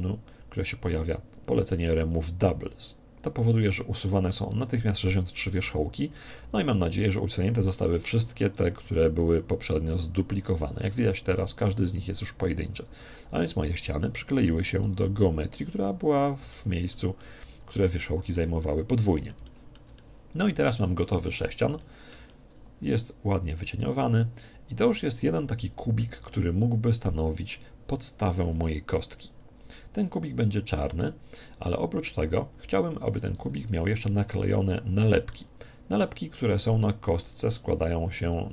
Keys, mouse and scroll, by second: 6.1-8.3 middle drag, 7.0-10.3 right drag, 10.9 right click, 13.4-16.6 right drag, 15.0 g, 16.0-21.5 middle drag, 21.0 Tab, 21.6-24.0 middle drag, 26.2-28.0 middle drag, 29.9-32.6 middle drag, 31.6 Tab, 33.3 ctrl+Tab, 35.2-37.0 middle drag, 37.2 right click.